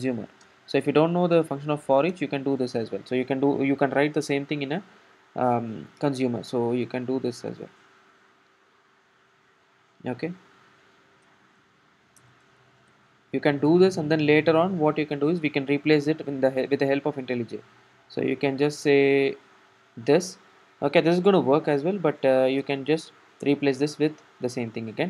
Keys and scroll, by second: 8.0 super+c, 8.7 super+c, 9.2 super+v, 22.7 alt+Return.